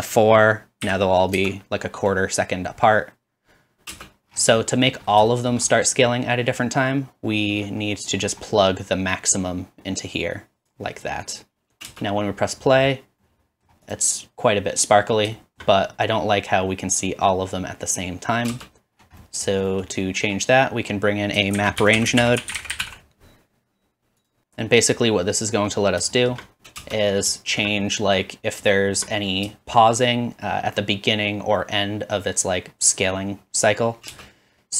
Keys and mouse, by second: 3.9 space, 4.9 click, 5.2-6.2 shift+middle drag, 9.5-14.1 drag, 11.9 space, 14.1-15.7 middle drag, 15.7-18.7 drag, 18.7 space, 21.5 shift+a, 23.7-24.8 drag, 24.4 space, 26.8 space, 27.9-29.1 middle drag, 29.1 click, 29.5 shift+middle click, 29.8-32.8 drag, 34.1 space.